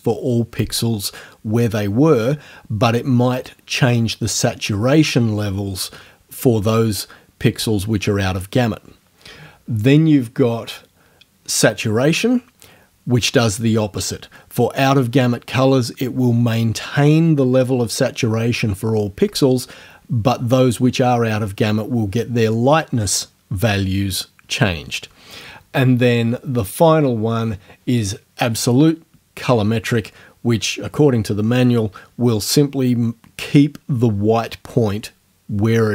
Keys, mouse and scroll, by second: 10.6 scroll down 1, 27.0 scroll down 2.